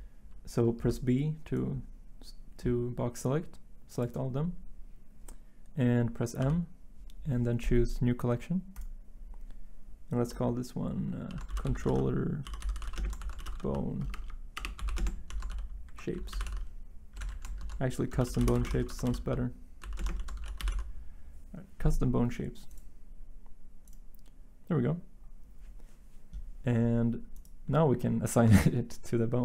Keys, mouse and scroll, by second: 0.8 b, 6.4 m, 11.2 c, 12.6-20.4 typing.